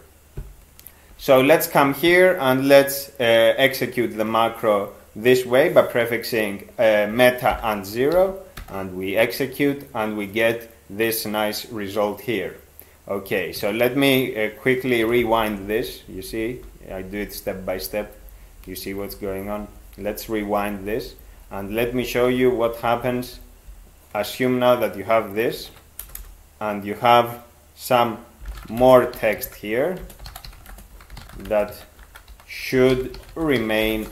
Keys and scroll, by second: 1.1 ctrl+f, 7.5 alt+0, 8.2 ctrl+x, 8.6 e, 15.0 ctrl+/, 15.2 ctrl+/, 15.4 ctrl+/, 15.5 ctrl+/, 15.7 ctrl+/, 16.0 ctrl+/, 16.2 ctrl+/, 16.4 ctrl+/, 16.6 ctrl+/, 16.7 ctrl+/, 16.9 ctrl+/, 17.0 ctrl+/, 17.2 ctrl+/, 17.4 ctrl+/, 17.6 ctrl+/, 17.7 ctrl+/, 17.9 ctrl+/, 18.1 ctrl+/, 18.2 ctrl+/, 18.4 ctrl+/, 18.6 ctrl+/, 18.8 ctrl+/, 18.9 ctrl+/, 19.1 ctrl+/, 19.2 ctrl+/, 19.4 ctrl+/, 19.6 ctrl+/, 19.8 ctrl+/, 19.9 ctrl+/, 20.1 ctrl+/, 20.2 ctrl+/, 20.4 ctrl+/, 20.6 ctrl+/, 20.7 ctrl+/, 20.9 ctrl+/, 21.0 ctrl+/, 21.2 ctrl+/, 21.4 ctrl+/, 21.5 ctrl+/, 21.7 ctrl+/, 21.8 ctrl+/, 22.0 ctrl+/, 22.2 ctrl+/, 22.3 ctrl+/, 22.5 ctrl+/, 22.7 ctrl+/, 22.8 ctrl+/, 23.0 ctrl+/, 23.2 ctrl+/, 23.3 ctrl+/, 23.6 ctrl+/, 25.6 ctrl+e, 26.0 Return, 26.2 Return, 28.2-34.1 typing.